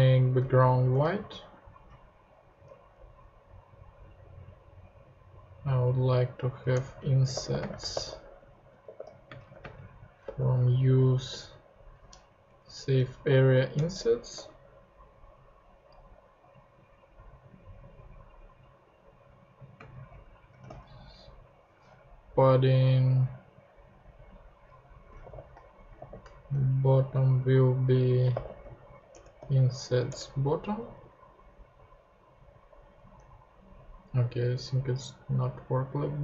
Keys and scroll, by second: 0.0-1.0 typing, 2.6 super+Tab, 6.7 Return, 6.9-10.9 typing, 12.3 Down, 13.7 Return, 14.3 ;, 19.7-21.1 typing, 24.8-26.9 typing, 28.0-29.4 typing, 30.1 Return, 30.8 super+Tab, 32.9 super+Tab.